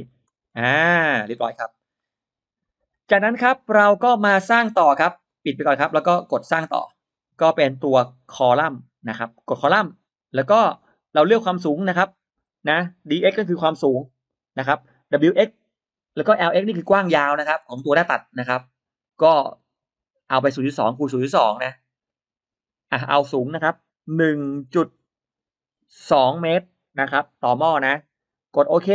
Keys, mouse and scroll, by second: 0.0 click, 0.4-1.0 scroll down 2, 1.3-1.6 scroll up 2, 1.8 middle click, 2.7-3.0 scroll down 2, 5.2 click, 6.3 click, 7.4 click, 9.0 click, 11.1 click, 12.2 click, 24.2 1, 26.0 2.